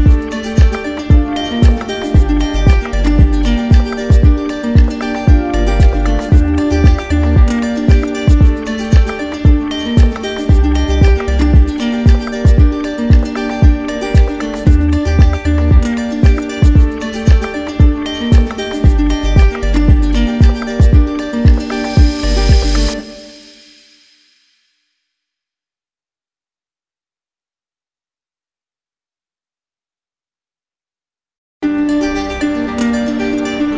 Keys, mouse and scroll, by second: 1.6 alt+click, 2.0 click, 8.4 click, 11.2 right click, 16.7 click, 19.2 click, 19.3 ctrl+z, 20.4 right click, 28.8 click, 29.0 ctrl+z, 30.2 click, 33.0 click.